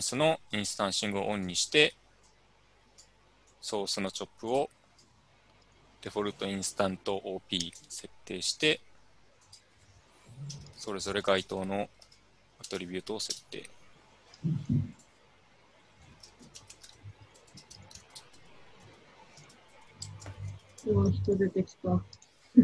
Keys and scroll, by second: 10.3-13.4 typing, 15.7-21.1 typing, 19.5 Tab.